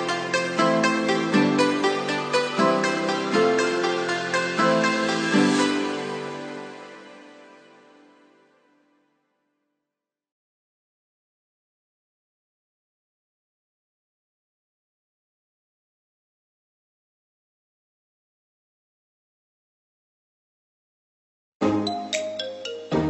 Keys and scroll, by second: 18.7 ctrl+=.